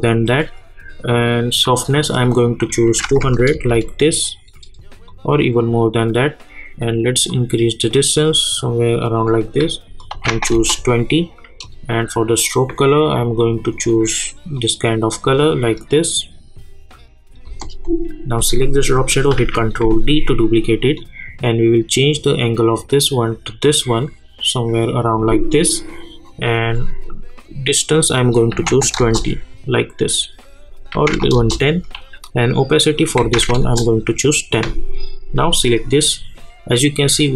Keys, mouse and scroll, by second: 3.5 \, 5.1-10.0 drag, 10.5 Return, 11.6-17.4 drag, 17.4 Return, 18.5 click, 19.4 ctrl+d, 21.0-28.1 drag, 28.9 Return, 30.7 click, 31.3 Return, 32.9 click, 33.6 Return, 35.5 click.